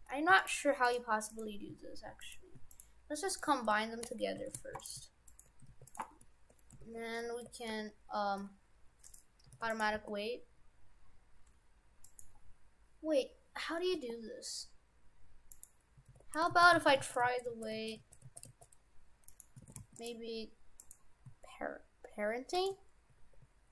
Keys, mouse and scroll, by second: 0.9 right click, 1.3 right click, 2.3 right click, 2.7 shift+right click, 3.3 shift+right click, 3.5 shift+right click, 4.1 ctrl+j, 4.5 shift+f, 5.3 shift+right click, 5.7 ctrl+Tab, 5.9 right click, 6.8 ctrl+Tab, 7.7 ctrl+p, 9.5 ctrl+Tab, 9.7 right click, 9.9 r, 13.9 r, 16.1 ctrl+Tab, 16.5 ctrl+z, 16.9 ctrl+z, 17.1 ctrl+z, 17.3 ctrl+z, 17.5 ctrl+z, 17.8 ctrl+z, 18.1 ctrl+z, 18.3 ctrl+z, 18.5 ctrl+z, 19.3 right click, 19.7 shift+f, 20.8 right click, 22.6 shift+right click, 23.1 ctrl+Tab.